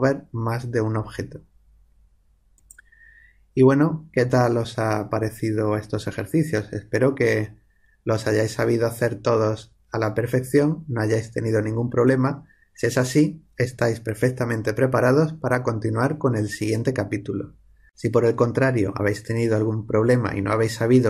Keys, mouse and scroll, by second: 2.5 click.